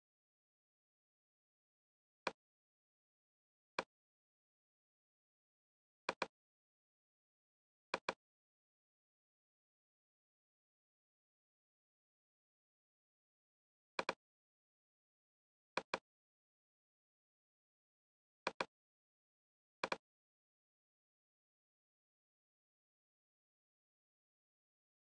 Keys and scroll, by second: 11.3 super+g.